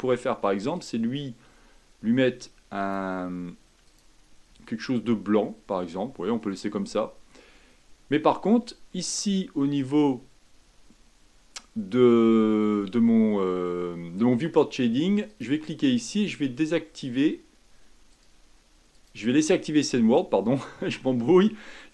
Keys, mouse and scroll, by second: 0.8 click, 4.0-8.4 drag, 9.8 click, 18.1 click.